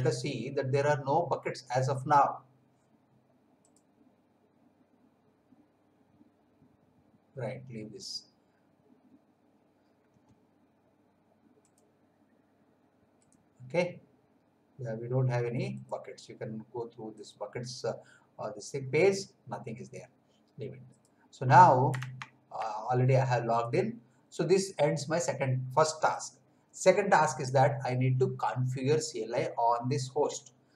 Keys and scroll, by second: 22.2 alt+Tab, 30.5-30.7 typing.